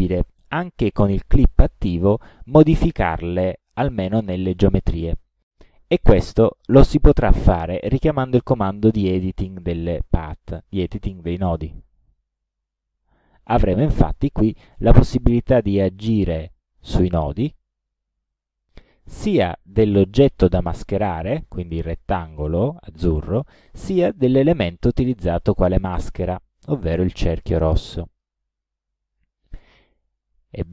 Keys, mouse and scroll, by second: 0.5 click, 11.4 click, 13.4 click, 15.0 click, 16.0-17.1 drag, 19.2 click, 20.8 click, 21.4 click, 21.8 click, 26.8-28.4 drag, 29.2 click.